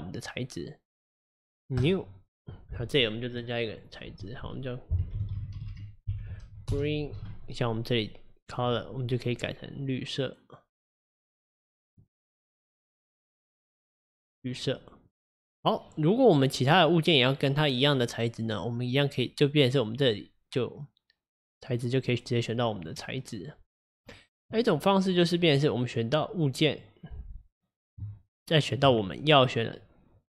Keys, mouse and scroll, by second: 1.8-5.7 drag, 5.7 e, 8.5 click, 15.1 click, 16.8 click, 19.6-21.8 drag, 22.1-25.1 drag, 25.2 click, 25.9 click, 26.7 click, 28.6 shift+click.